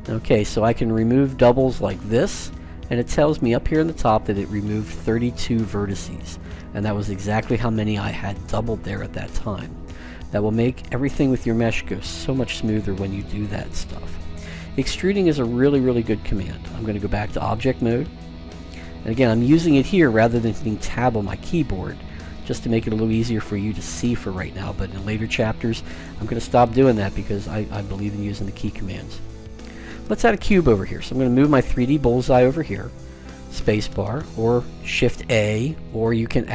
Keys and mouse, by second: 1.9-3.4 drag, 14.9-16.9 middle drag, 18.6 click, 20.4 Tab, 21.8 Tab, 23.4 middle click, 23.7 middle click, 27.1 Tab, 28.1 Tab, 31.2-33.0 drag, 33.0 space.